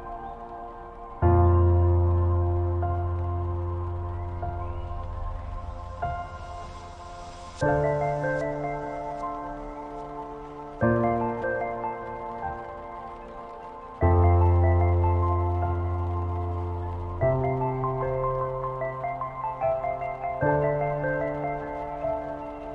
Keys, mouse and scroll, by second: 0.4 click, 1.3 ctrl+t, 3.0-10.4 drag, 10.4 Down, 14.6 Up, 16.2 Up, 16.9 Down, 21.6 Down, 21.6 click.